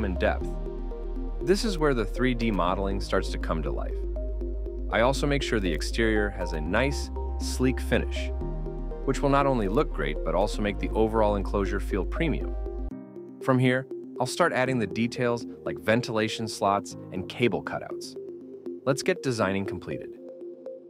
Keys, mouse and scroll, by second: 0.4-1.4 typing, 5.2 middle click, 9.5 typing, 10.1 Return, 10.8 middle click, 14.1-14.8 scroll down 1, 14.8 middle click.